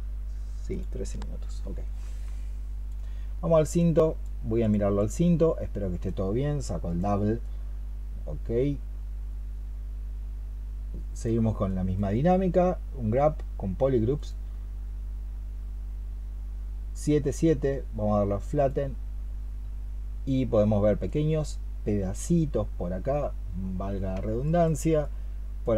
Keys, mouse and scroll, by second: 4.8 double click.